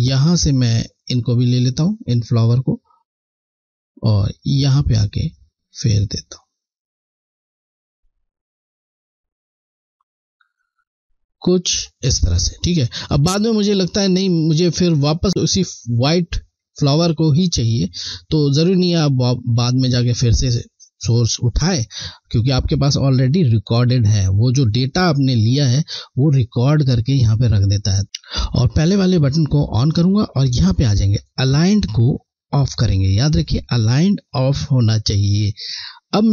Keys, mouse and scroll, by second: 2.1 alt+click, 17.5 scroll, 29.7 click, 32.5 Left, 32.5 click.